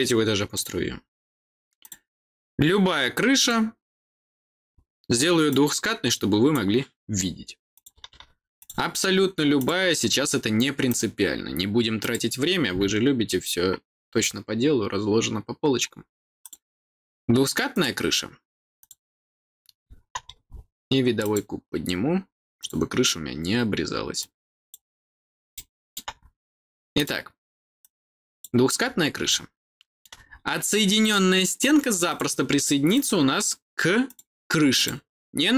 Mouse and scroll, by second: 0.4 click, 1.7 click, 3.3 click, 5.4-6.4 drag, 7.6 click, 8.5 click, 9.5 click, 10.8 click, 11.9 click, 16.3 click, 17.6 click, 18.7 click, 21.1 click, 22.5 click, 24.1 click, 25.4 middle click, 26.0-26.8 scroll up 1, 26.8 click, 27.7 click, 29.2 middle click, 30.2-30.9 scroll up 1, 30.9 click, 32.0 click, 32.8 click, 33.9 click, 34.7 click.